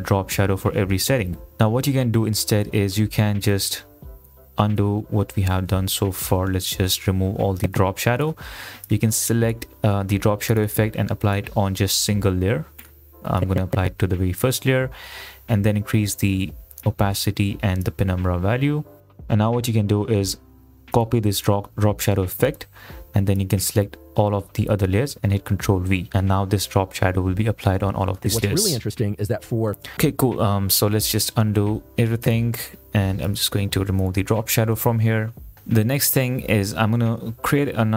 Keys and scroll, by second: 4.1 ctrl+z, 4.9 ctrl+z, 25.9 ctrl+v, 28.3 space, 29.9 space, 31.3 ctrl+z, 34.9 Delete.